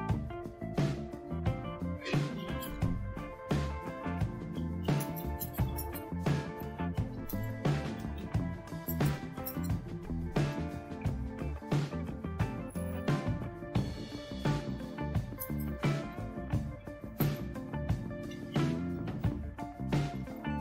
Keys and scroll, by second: 0.0-1.1 typing, 2.3-10.9 typing, 13.7 Return, 15.4-20.6 typing.